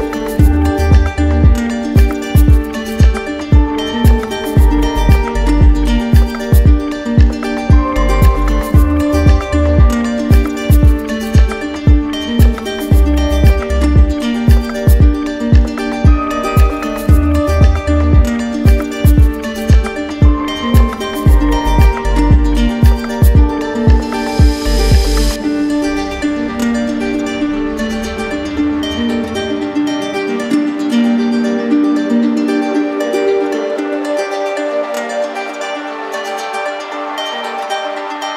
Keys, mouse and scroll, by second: 1.0-2.1 drag, 3.8-4.9 drag, 6.0-7.1 drag, 8.8 click, 9.0 ctrl+z, 12.9-14.0 drag, 14.8-15.9 right drag, 16.0-17.0 drag, 18.0 click, 20.0 click, 21.6 click, 22.1 click, 22.5 shift+click, 23.3 alt+click, 24.1 alt+click, 24.9 alt+click, 25.7 click, 26.5 alt+click, 27.1 click, 29.6-30.7 right drag, 30.8-31.9 drag, 32.8-33.8 drag, 36.0 click, 37.1 click, 37.5 alt+click, 38.2 click.